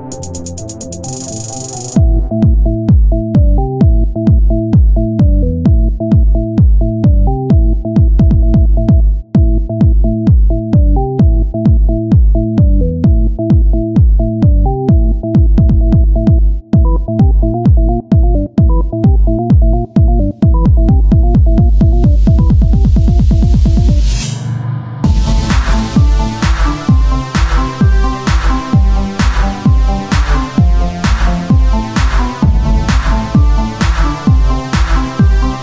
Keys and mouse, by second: 0.6 ctrl+r, 0.6 ctrl+Tab, 1.5 z, 3.0 z, 3.5 z, 7.5 z, 8.7 e, 10.5 Tab, 15.4 Tab, 18.8 ctrl+Tab, 20.8 ctrl+Tab, 20.8-22.0 drag, 22.5 middle click, 23.0 KP_3, 24.7 z, 25.4 z, 25.5 c, 26.9 click, 27.0 z, 27.2 c, 28.4 z, 29.8 o, 30.2 s, 32.1 click, 33.9 Tab.